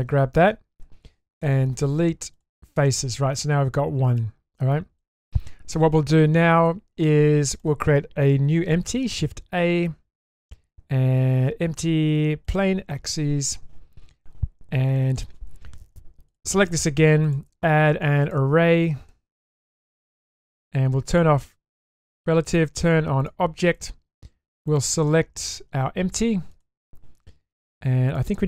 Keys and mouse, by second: 0.5 shift+middle click, 1.4 Delete, 2.8 middle click, 3.2 Tab, 4.1-4.7 middle drag, 5.0 shift+middle drag, 7.5 click, 9.1 shift+a, 17.3-19.9 drag, 19.0 r, 21.6 click, 23.2 click, 23.7 click, 24.7 click, 28.2-28.4 drag.